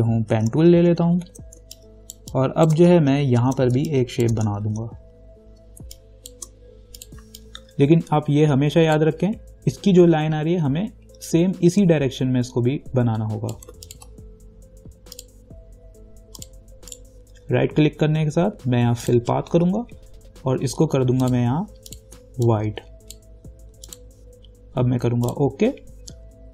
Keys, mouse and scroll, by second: 0.5 p, 0.9 ctrl+=, 1.8 space, 1.9 click, 2.4 space, 3.2 ctrl+=, 4.0 space, 4.1 click, 4.9 ctrl+=, 5.8 click, 6.0 space, 6.2 click, 6.5 space, 7.2 click, 7.6-11.5 ctrl+drag, 11.5-14.1 ctrl+drag, 17.1 right click, 19.2 click, 21.4-24.1 drag.